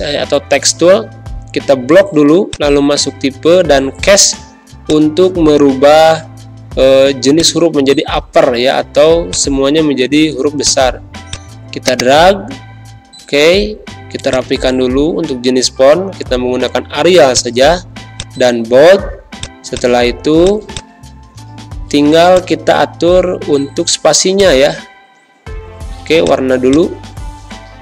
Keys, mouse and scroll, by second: 2.4 click, 12.5 ctrl+a, 14.3 click, 14.9 a, 17.3 click, 25.8 z, 26.1 click, 26.5 space, 26.6 click, 27.2 v.